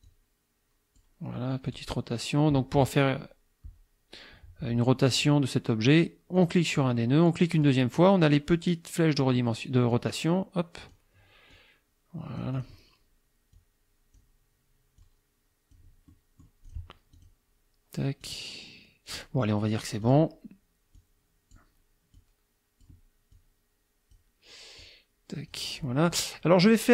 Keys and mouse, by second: 0.1-1.2 drag, 1.7 click, 6.4 click, 7.6 click, 9.9-11.1 drag, 11.5-12.8 drag, 13.5 click, 15.0 click, 16.1 click, 17.1 click, 18.3-19.3 drag, 19.4 click, 20.1 click, 21.0 click, 22.2 click, 23.3-24.4 drag, 24.8 click.